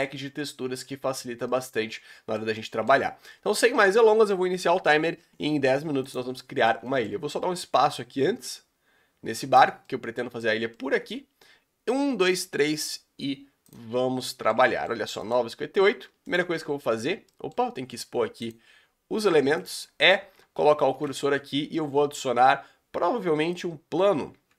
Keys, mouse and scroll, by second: 3.0-3.7 scroll up 2, 3.7-6.1 shift+middle drag, 6.1 click, 6.3-8.0 middle drag, 8.0 click, 9.8-15.2 middle drag, 15.2 shift+right click, 16.3 shift+right click, 18.4 click, 19.6-20.6 shift+right drag, 20.8 shift+Right, 23.6 shift+a, 23.8-24.5 scroll up 4, 24.4 Tab.